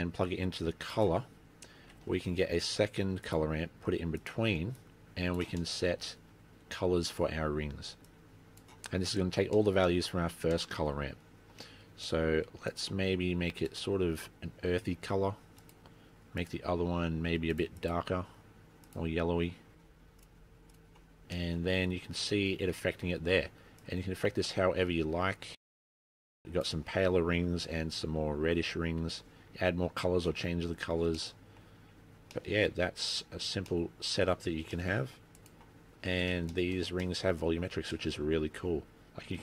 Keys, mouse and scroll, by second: 1.5-2.1 scroll up 4, 2.1 shift+a, 4.9 click, 5.8 middle click, 6.1 scroll up 4, 7.2 click, 9.5 scroll down 2, 9.7 middle click, 10.8 middle click, 12.3 middle click, 12.8 click, 15.7 click, 16.5 click, 20.3 click, 21.6 middle click, 22.0 scroll up 2, 24.0 click, 30.6-31.3 scroll down 10, 31.3 middle click, 32.5 middle click, 32.8 scroll down 2, 34.0 middle click, 34.0 scroll up 3, 35.0 middle click, 35.6 click, 36.6 shift+middle click, 37.1 middle click, 37.5-37.8 scroll up 3, 38.1 middle click, 39.0-39.4 scroll up 2.